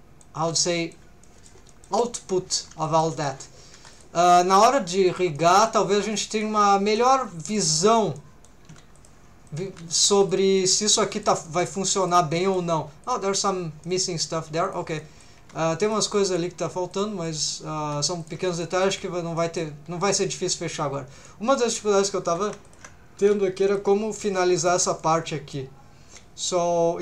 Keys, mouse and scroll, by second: 0.5 middle click, 1.2 middle click, 1.7 shift+middle click, 2.0 middle click, 2.9 shift+middle click, 3.1 middle click, 3.7 3, 3.9 click, 4.2 middle click, 4.5 g, 5.1 shift+click, 5.4 middle click, 5.9 g, 6.3 shift+click, 6.6 middle click, 7.2 g, 7.5 shift+click, 7.6 click, 8.2 middle click, 8.6 g, 8.9 shift+click, 9.5 click, 9.7 g, 10.2 shift+click, 10.6 middle click, 11.1 middle click, 11.5 middle click, 12.0 click, 12.3 middle click, 12.8 g, 13.0 shift+click, 13.8 middle click, 14.7 click, 15.0 middle click, 15.3 g, 15.9 shift+click, 16.2 middle click, 16.9 click, 17.3 middle click, 17.8 g, 18.2 shift+click, 18.5 middle click, 18.8 shift+middle click, 19.4 middle click, 19.9 scroll up 1, 20.2 middle click, 21.3 middle click, 22.3 2, 22.7 alt+shift+click, 23.2 alt+a, 23.6 alt+shift+click, 24.6 alt+shift+click, 25.0 middle click.